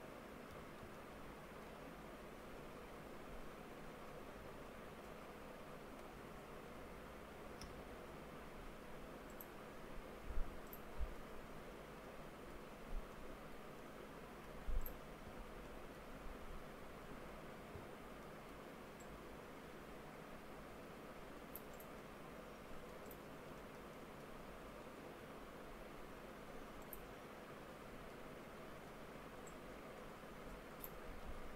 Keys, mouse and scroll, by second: 0.6 2, 1.0-11.0 shift+middle drag, 11.0 scroll down 1, 11.2-12.7 middle drag, 12.7 scroll up 1, 13.2-14.9 middle drag, 14.9 click, 15.7-16.9 middle drag, 16.9 3, 18.3 middle click, 19.0-22.0 drag, 22.0-23.1 middle drag, 23.1 click, 23.6 alt+middle click, 25.3 s, 28.2-29.5 middle drag, 29.5-31.3 drag, 31.3 ctrl+z.